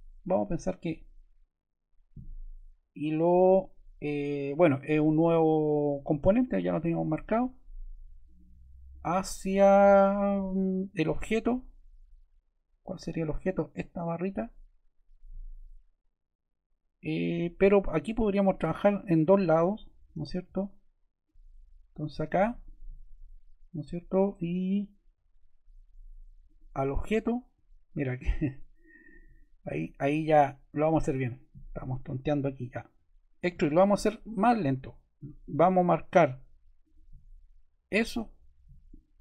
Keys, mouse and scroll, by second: 18.0 click, 19.1 click.